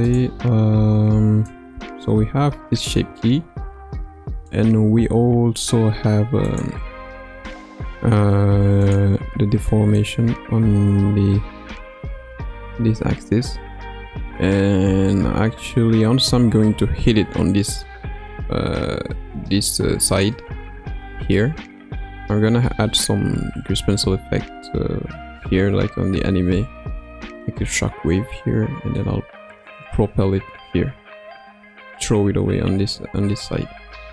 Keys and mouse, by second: 6.4 click, 8.8 click, 9.9-20.3 drag.